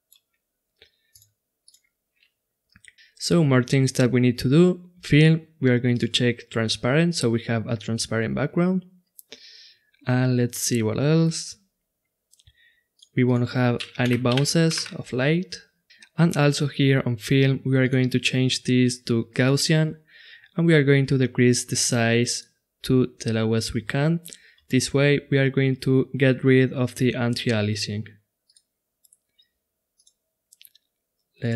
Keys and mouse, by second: 1.1-2.9 drag, 5.9-7.7 drag, 11.4-14.9 drag, 17.8-19.5 drag, 21.5-23.4 drag, 28.4-31.5 drag.